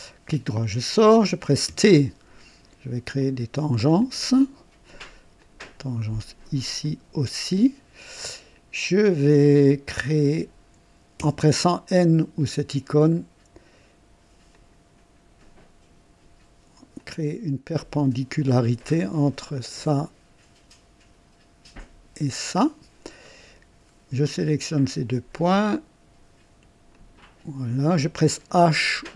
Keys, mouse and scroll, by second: 0.2 right click, 1.6 typing, 3.1 click, 4.0 click, 5.3 click, 6.8 click, 9.4 click, 11.1 typing, 14.5 click, 16.9 click, 17.8 right click, 19.5 click, 21.7 click, 23.2 right click, 24.6 click, 26.9 click.